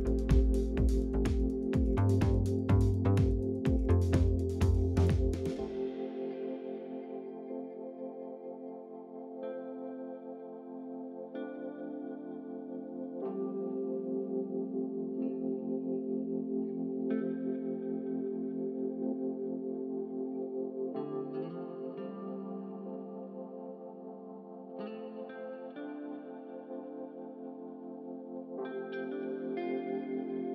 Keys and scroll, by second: 22.2-23.4 typing, 24.0 Return.